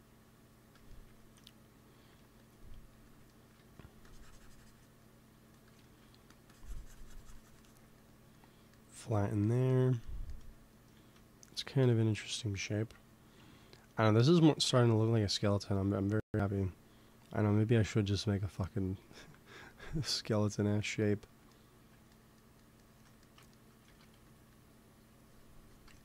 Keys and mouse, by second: 0.9-2.1 middle drag, 2.1 f, 2.8 f, 3.0-5.9 drag, 3.5 f, 5.3 f, 6.1 f, 6.4-8.2 drag, 10.9 ctrl+s, 11.8 KP_1, 14.6 ctrl+s, 15.2-17.8 drag, 23.8 shift+c, 24.0 f, 25.1-26.0 drag.